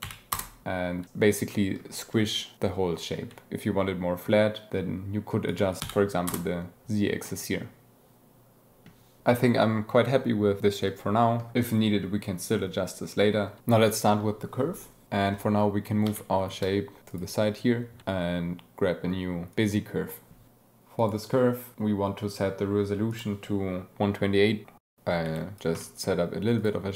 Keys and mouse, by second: 1.5 drag, 3.5-5.4 shift+drag, 5.7 click, 7.2-8.8 drag, 16.0 g, 16.4 y, 18.1 shift+a, 20.9 click, 23.1-24.8 drag, 24.8 Tab, 24.9 e, 25.3 click, 25.4 click, 26.3 g, 26.6 click.